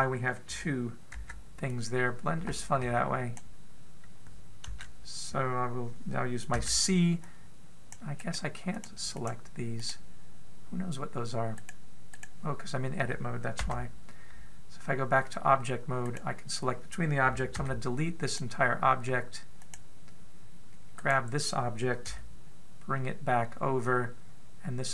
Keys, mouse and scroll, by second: 1.9 b, 7.3 a, 7.3 c, 9.5 click, 9.6 click, 9.9 click, 10.7 click, 12.3 right click, 13.0 right click, 14.5 Tab, 16.9 right click, 18.3 x, 20.8 click, 21.8 right click, 22.9 g.